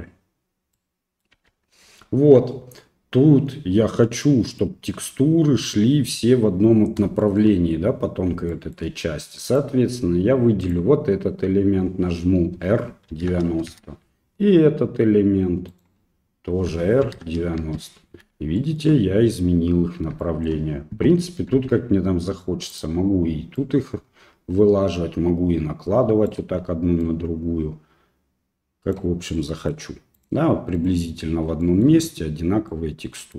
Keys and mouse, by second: 0.8 middle click, 1.3 n, 4.2 middle click, 7.2 shift+click, 8.6 shift+click, 9.4 right click, 10.6 right click, 12.5 r, 15.7 right click, 16.7 r, 18.6 shift+middle click, 20.2 shift+middle click, 21.5 g, 23.6-26.4 right drag, 27.0-28.9 right drag, 29.4 middle click, 30.2 right click, 30.8 right click, 31.6 shift+middle click, 32.7 middle click.